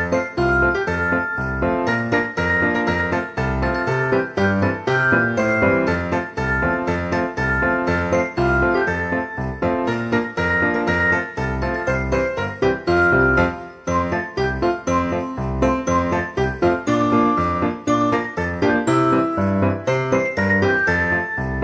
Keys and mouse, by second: 0.1 click, 0.7 d, 1.5 click, 2.4 z, 4.5 click, 4.6 shift+middle click, 5.0 g, 5.2 y, 5.8 click, 6.0 s, 6.3 right click, 6.4 ctrl+a, 7.0 click, 7.3 alt+z, 7.6 shift+middle click, 8.4 shift+middle click, 9.3 g, 9.4 x, 10.5 click, 10.5 middle click, 11.6-13.7 typing, 13.3 click, 15.1 click, 15.4 shift+d, 15.5 y, 16.7 click, 17.2 click, 17.4 alt+z, 17.7 g, 17.8 y, 18.6 click, 18.8 alt+z, 19.4 shift+d, 20.3 click, 21.2 click, 21.4 y.